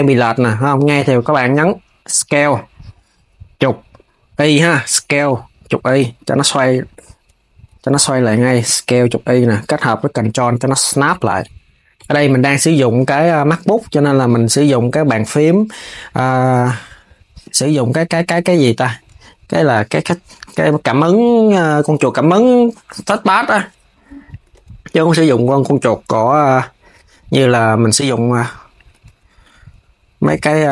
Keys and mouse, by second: 11.4 s, 11.6 KP_3, 12.2 g, 15.6 click, 17.1 shift+click, 19.7 KP_3, 20.6 g, 22.5 click, 23.9 shift+click, 24.2 KP_3, 24.7 g, 27.3 click, 28.4 shift+click, 28.7 KP_3, 29.4 g.